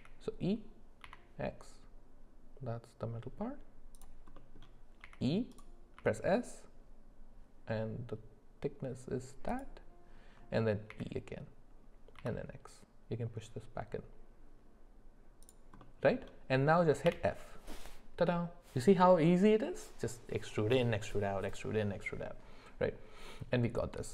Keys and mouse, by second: 0.0 e, 4.3 middle click, 5.0 e, 10.9 e, 15.8 middle click, 17.1 f.